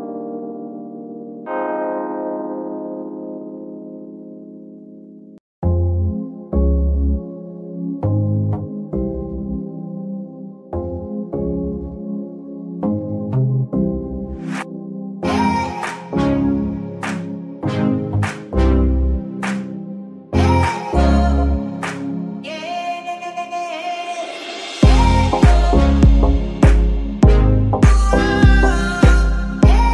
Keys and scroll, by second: 5.4 ctrl+Tab, 8.5 Escape, 11.0 Escape, 28.4 KP_Decimal, 29.7 g.